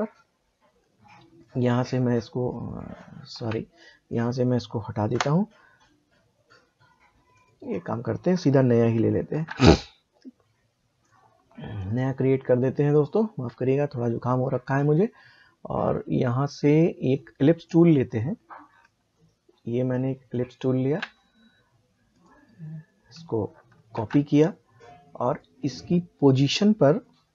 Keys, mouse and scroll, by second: 1.4-3.3 drag, 3.3 ctrl+z, 4.1 click, 7.3 click, 9.3 ctrl+n, 11.0 click, 16.3 click, 23.9 ctrl+c, 25.3 click.